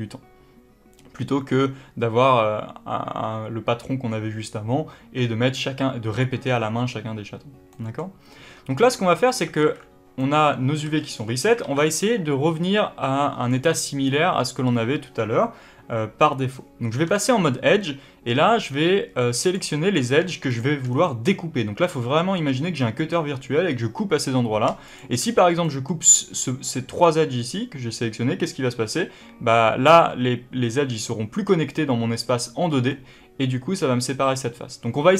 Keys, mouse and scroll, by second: 7.6-15.8 middle drag, 9.5 alt+a, 10.7 a, 17.3-19.3 middle drag, 17.3-19.3 scroll up 2, 19.3 click, 20.4 shift+click, 20.7 scroll down 3, 20.9-24.8 middle drag, 22.5 scroll up 1, 24.8 shift+click, 25.5-35.1 middle drag.